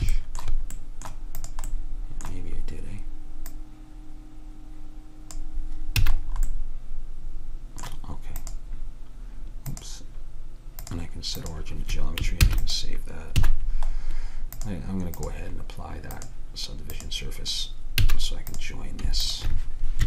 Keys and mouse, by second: 0.4-1.5 middle drag, 1.5-3.4 drag, 1.5 right click, 3.6-5.3 right drag, 6.1 a, 8.5-12.5 drag, 12.5 ctrl+s, 13.5 a, 14.6 click, 18.2 a.